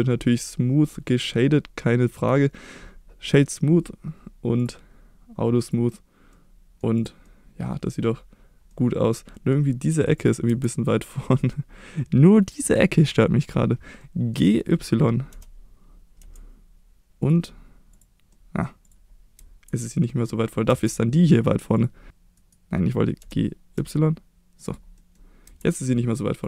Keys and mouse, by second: 0.2 middle click, 2.2-3.3 right drag, 4.6 click, 5.6 click, 6.3-6.8 middle drag, 7.0 click, 7.3-8.0 middle drag, 8.7-9.1 middle drag, 9.3 middle drag, 10.2 click, 10.5 Tab, 11.3 middle click, 12.7 click, 14.0 middle click, 15.3 g, 16.2 y, 17.2 click, 17.9 click, 18.3 middle click, 19.4 Tab, 20.1-20.7 middle drag, 20.7 Tab, 22.1 ctrl+z, 22.1 g, 22.1 x, 22.4 right click, 23.2 g, 23.7 y, 24.6 click, 25.0 middle drag, 25.4 Tab, 26.3 click.